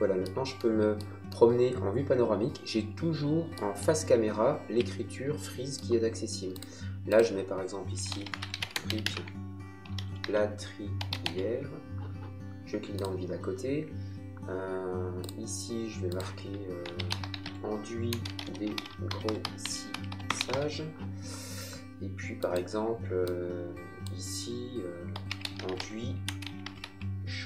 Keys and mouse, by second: 3.8 middle click, 6.5 click, 7.7-11.7 typing, 12.9 click, 15.2 click, 16.6-21.0 typing, 22.4 click, 24.9-27.4 typing.